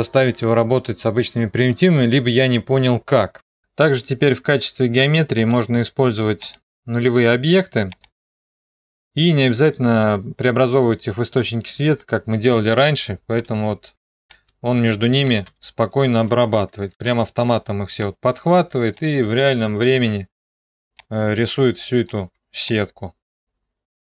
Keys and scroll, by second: 17.2 ctrl+d, 20.2 ctrl+d.